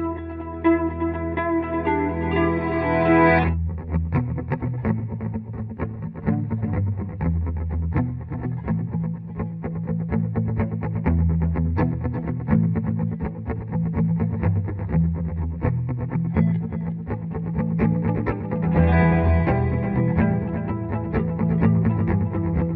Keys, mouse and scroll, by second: 1.2 right click, 2.6 click, 3.3 F2, 5.1 click, 7.5 F11, 10.2 click, 14.0 click, 14.5 Tab, 17.1 Return, 18.5 click, 18.9 Return, 19.4 right click, 21.5 right click, 22.4 click.